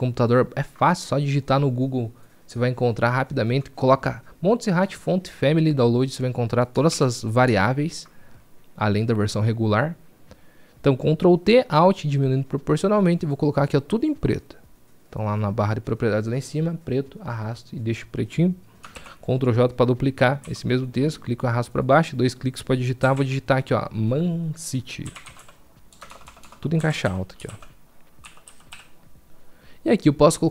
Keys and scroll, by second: 10.9 ctrl+t, 19.8 ctrl+j, 23.3 ctrl+j.